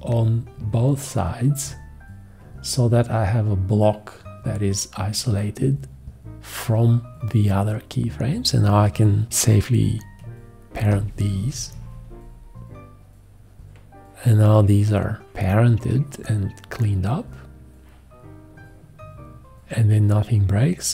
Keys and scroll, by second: 1.4 x, 10.7 alt+;.